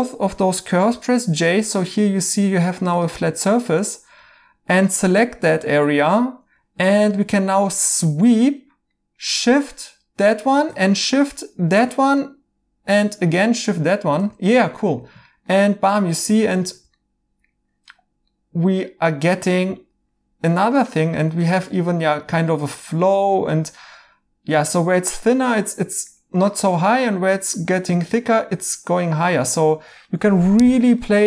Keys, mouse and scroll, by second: 0.9 j, 1.6 j, 1.9 right click, 8.9 right click, 12.1 right click, 14.3 right click, 18.3 right click, 21.7 right click, 23.8 right click, 25.4 right click, 26.8 right click.